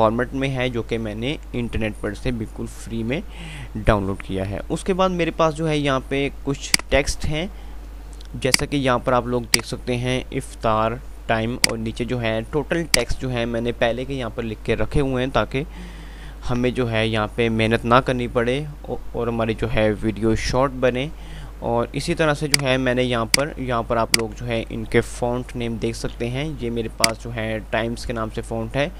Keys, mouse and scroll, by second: 4.7 F3, 7.0 click, 7.2 F2, 8.0 F2, 8.5 click, 22.7 click, 23.8 typing, 25.4 F5.